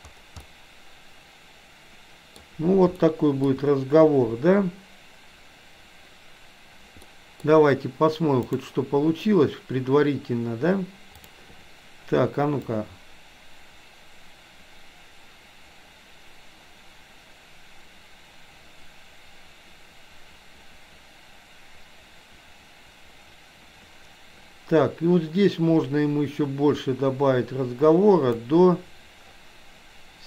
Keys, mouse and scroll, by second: 0.5-2.5 middle drag, 3.1 shift+middle click, 7.1 middle click, 12.9-29.6 drag.